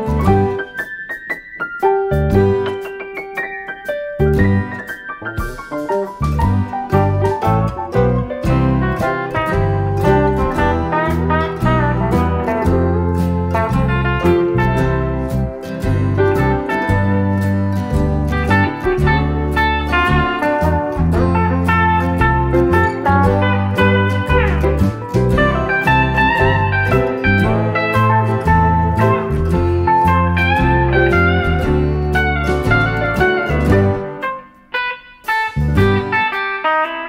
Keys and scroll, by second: 3.1 F1, 3.6-4.4 typing, 15.0-15.7 typing, 19.2 ctrl+d, 20.5 ctrl+*, 30.4-31.9 typing, 35.7-36.4 typing.